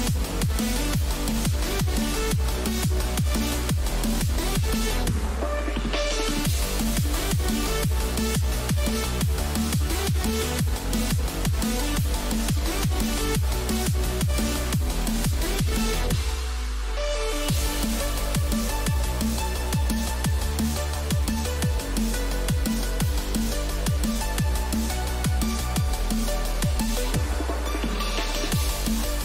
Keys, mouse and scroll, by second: 4.4-11.2 middle drag.